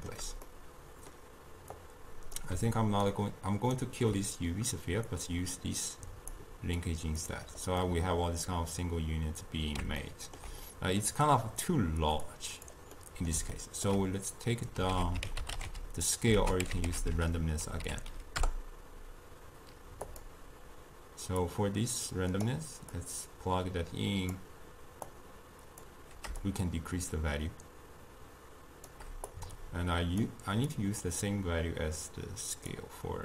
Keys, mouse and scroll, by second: 1.8 click, 3.1 ctrl+right click, 5.2-6.9 drag, 7.9-12.3 middle drag, 12.3 click, 13.0-15.0 middle drag, 15.0 ctrl+a, 21.5-33.2 drag.